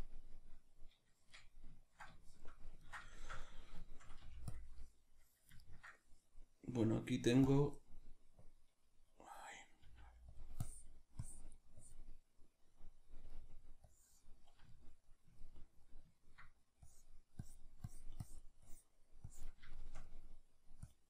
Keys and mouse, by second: 1.1-4.5 shift+middle drag, 4.2 f, 4.5 click, 5.6-8.5 ctrl+middle drag, 8.5-10.4 drag, 9.8 f, 12.4-13.9 middle drag, 13.9 click, 14.7-16.9 ctrl+middle drag, 16.9-19.8 drag, 19.8-20.9 shift+middle drag, 20.9 click.